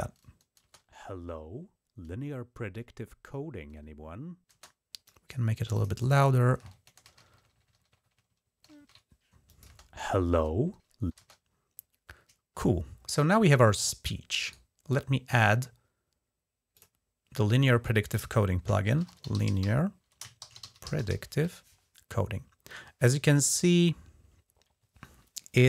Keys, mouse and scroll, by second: 0.4 space, 4.3 space, 4.8 click, 5.5 click, 5.8 click, 6.8 alt+6, 9.3 click, 9.5 space, 11.0 space, 14.2-16.5 right drag, 16.5 click, 18.6-20.9 typing, 25.6 super+=.